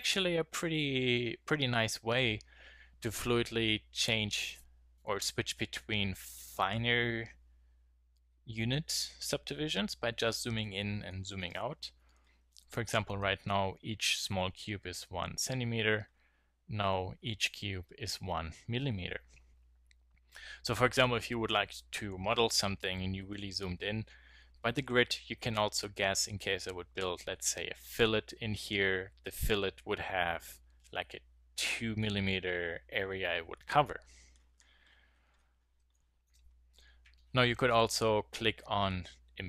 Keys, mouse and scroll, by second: 2.4-12.8 middle drag, 15.2-24.5 middle drag, 34.0-35.9 middle drag.